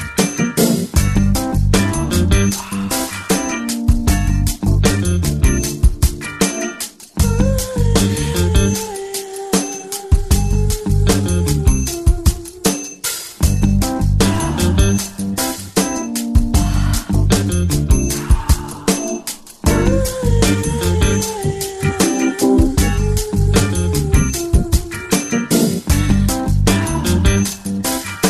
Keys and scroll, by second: 11.1 ], 11.6 ], 13.2 [, 25.7 ctrl+t.